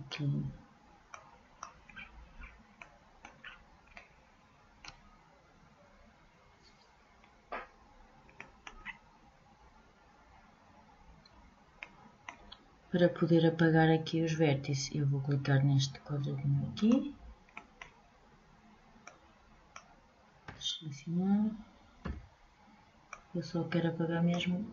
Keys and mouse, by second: 0.7 click, 1.4-8.4 middle drag, 9.3 middle click, 17.1 middle click.